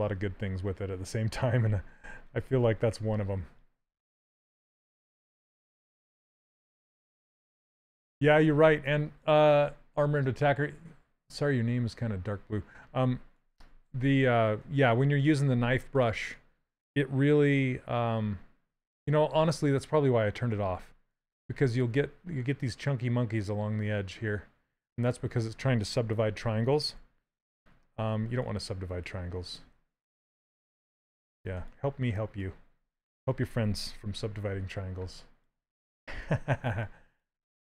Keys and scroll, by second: 17.8 d, 27.1 s.